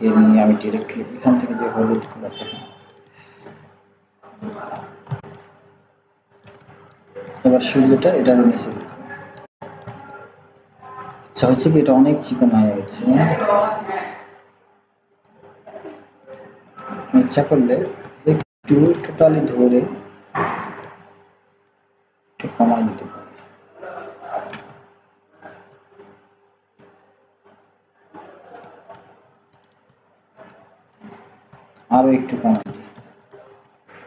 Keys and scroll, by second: 33.4 ctrl+z.